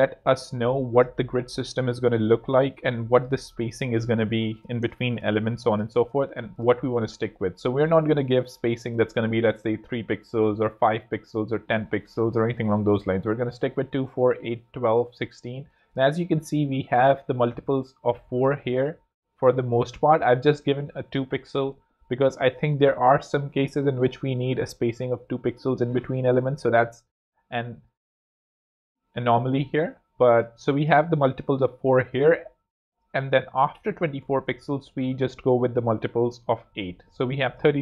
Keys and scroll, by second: 4.3 z, 4.8 space, 6.2 z, 8.0 z.